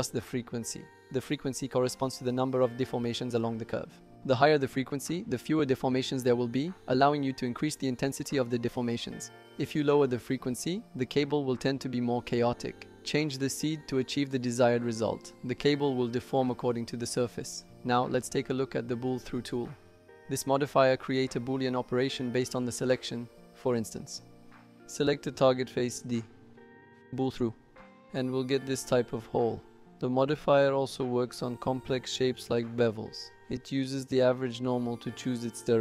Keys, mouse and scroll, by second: 13.1-14.4 drag, 16.6-17.7 drag, 18.3 middle click, 24.1 click, 24.8 shift+click, 28.5 click, 29.2 middle click, 29.8-31.5 drag, 32.6 ctrl+z, 33.7 click, 34.9 ctrl+click.